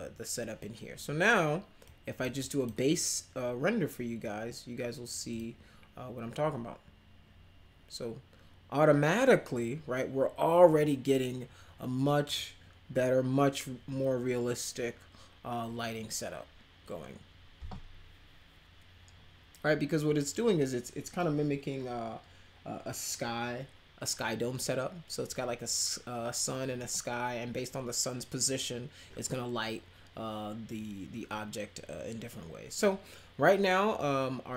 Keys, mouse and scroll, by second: 1.8 click, 2.4 click, 5.3 click, 12.2 click.